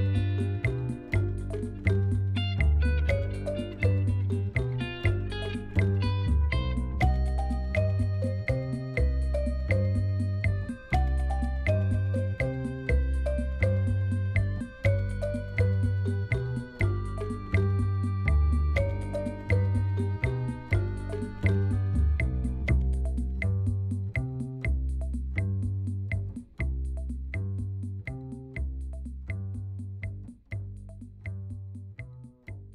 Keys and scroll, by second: 1.5 Tab, 2.1 Tab, 5.1 3, 10.0 ctrl+r, 10.7 Return, 11.6 k, 12.9 Return, 17.1 e, 20.2 e, 25.3 ctrl+b, 32.4 ctrl+r.